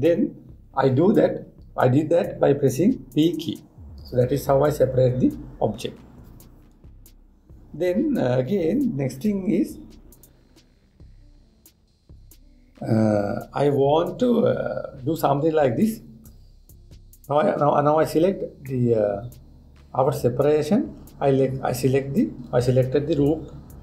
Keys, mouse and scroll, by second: 19.3-22.3 middle drag.